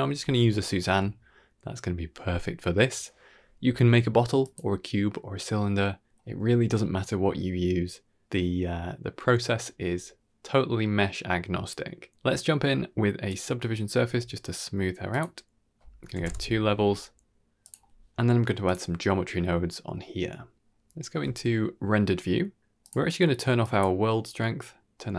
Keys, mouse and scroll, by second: 0.1 KP_1, 0.5-1.1 scroll up 5, 1.1 shift+middle drag, 1.5-2.4 shift+middle drag, 4.3 click, 8.4-13.3 drag, 15.0-16.1 drag, 17.5 click, 18.5 click, 19.8-20.6 middle drag, 20.7 z, 21.7 z, 22.7 click, 23.5 click.